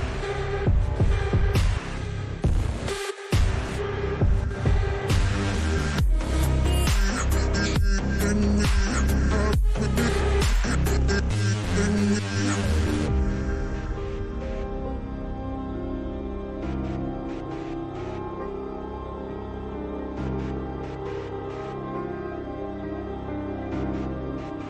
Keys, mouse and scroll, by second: 2.5 ctrl+space, 2.6 ctrl+click, 2.8 ctrl+space, 3.2 ctrl+space, 3.5 click, 3.7 click, 5.1 Up, 7.6 click, 8.2 ctrl+space, 8.3 ctrl+click, 8.5 ctrl+space, 9.7 click, 10.0 space, 10.4 click, 10.6 space, 11.3 click, 12.8-15.9 drag, 17.8 click, 18.1 ctrl+space, 18.2 ctrl+click, 18.4 ctrl+space, 19.0 space, 19.2 click, 19.4 space, 20.4 click, 21.1 Up, 21.2-21.9 typing, 21.4 click, 24.0 click.